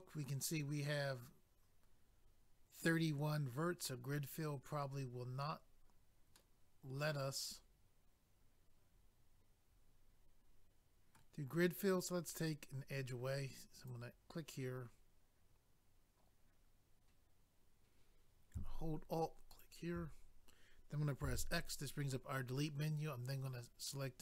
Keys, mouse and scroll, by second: 6.4 middle click, 13.7 click, 13.9 click, 19.5 alt+click.